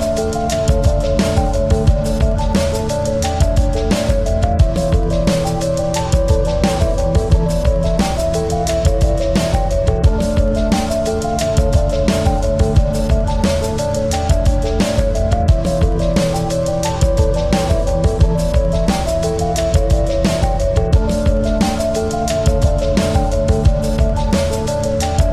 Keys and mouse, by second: 2.2 space, 2.4 click, 2.7 space, 4.1 click, 5.5 typing, 5.7-8.3 drag, 9.3-11.3 drag, 9.3 typing, 11.3 right click, 14.5 click, 14.5 typing, 15.9 click, 17.3-23.6 drag, 23.4 typing, 25.1 click, 25.1 typing.